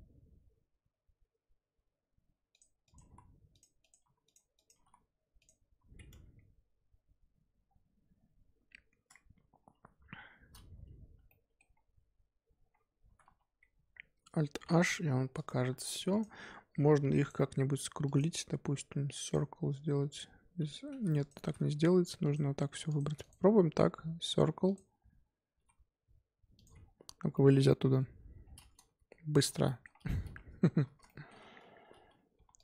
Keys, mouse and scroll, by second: 2.8 click, 2.9 g, 3.8 click, 4.0 g, 4.5 click, 4.7 g, 6.1 Tab, 7.6-8.6 scroll down 2, 8.6 Tab, 10.1-11.0 scroll down 4, 11.0 Tab, 11.3-12.7 middle drag, 12.7 scroll up 2, 13.0 Tab, 13.2 2, 14.7 alt+h, 15.3 click, 15.7 2, 16.1 alt+click, 17.1-21.1 right drag, 21.1 alt+shift+click, 21.5 scroll up 4, 22.2 alt+shift+click, 22.8 alt+shift+click, 23.2-25.5 right drag, 25.5 s, 26.8 scroll down 3, 26.9 Tab, 27.3-28.0 middle drag, 28.0 KP_7, 28.4 scroll down 3, 29.0 g, 29.6 shift+middle click, 29.9 scroll up 2, 30.2 Tab, 30.7 1, 31.0 shift+middle click, 31.3-32.3 scroll up 2, 32.3 1, 32.5 click.